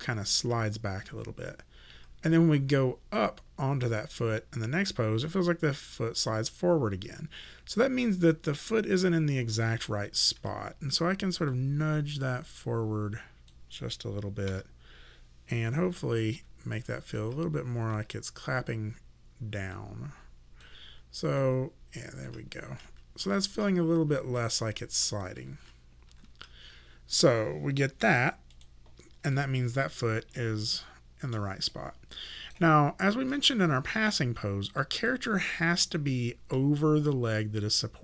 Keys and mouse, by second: 5.2 ,, 8.5 ., 10.4 w, 11.5 click, 14.5 s, 15.7 ,, 16.3 ., 16.7 ,, 17.1 ., 18.5 ,, 19.7 click, 20.9 ,, 21.4 ., 22.7-26.1 typing, 28.6 click, 29.4 alt+click, 30.4 alt+middle click, 31.7 alt+right click, 34.7 click, 35.1 alt+click.